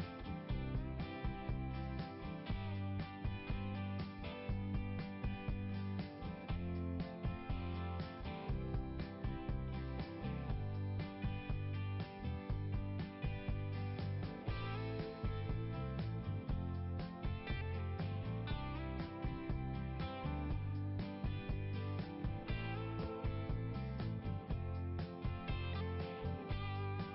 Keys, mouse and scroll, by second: 0.5 click, 3.2-3.6 scroll down 1, 7.0 click, 9.0 click, 10.5 click, 11.7-12.1 scroll down 1, 15.3 click, 16.1 click, 16.3 click, 17.9 click, 19.0 click, 19.2 click, 22.6 click, 22.9 click, 24.4 click, 25.6 click.